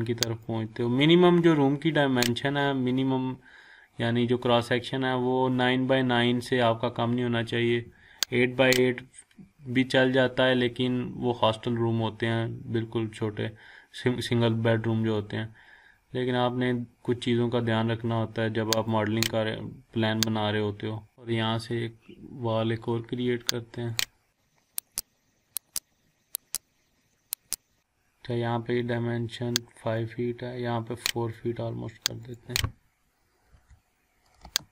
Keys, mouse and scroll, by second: 0.5-2.3 drag, 4.0 scroll down 1, 5.9-7.8 scroll up 1, 8.6 click, 11.1 scroll down 1, 13.5-13.8 scroll up 1, 18.9 click, 19.2-19.6 scroll up 1, 20.2-21.1 click, 21.1 scroll down 1, 21.6-23.5 scroll up 1, 23.9 click, 26.6 scroll up 1, 26.7 scroll down 1, 27.0 scroll up 1, 27.4 click, 27.7 scroll up 1, 27.9 scroll down 1, 28.5-29.0 scroll up 1, 30.0-31.5 drag, 33.5 4, 34.4 Return.